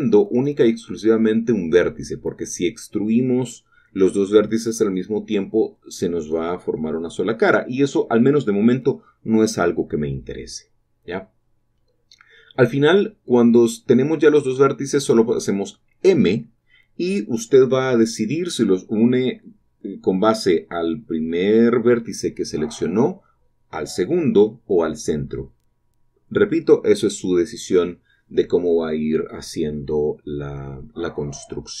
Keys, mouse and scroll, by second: 0.3 click, 0.4 click, 0.7 typing, 2.2 shift+click, 4.0 shift+click, 6.7 shift+click, 9.1 shift+click, 10.2 typing, 11.1 shift+click, 12.9 shift+click, 14.9 shift+click, 15.6 shift+middle click, 16.8 shift+click, 17.2 shift+click, 17.2-18.0 typing, 20.4 shift+click, 21.0 shift+middle click, 23.7 shift+middle click, 24.0 shift+middle click, 24.5 click, 25.7 typing, 26.9 shift+click, 27.1-28.1 scroll down 4, 28.9-29.2 scroll up 1, 29.4 shift+middle click, 29.9 shift+click, 30.3 shift+middle click, 30.5-31.0 scroll down 2, 31.4 click, 31.6-31.8 typing.